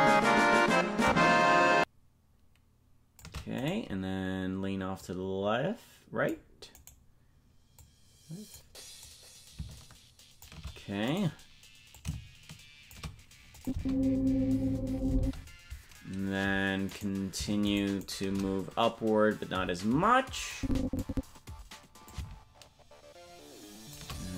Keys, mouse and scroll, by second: 1.0-3.2 shift+drag, 3.7 right click, 5.0-6.3 drag, 6.9 right click, 7.8 click, 9.0-10.5 drag, 11.2 right click, 11.9-12.9 shift+drag, 13.5 click, 13.7 space, 15.2 space, 17.0 right click, 17.7 shift+right click, 20.5 click, 22.0-24.0 shift+drag.